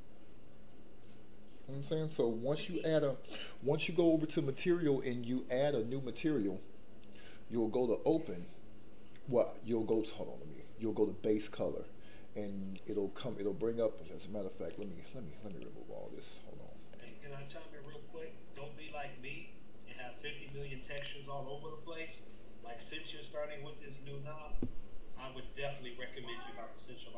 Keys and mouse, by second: 9.9 click, 15.4-17.1 drag, 17.8-18.8 drag.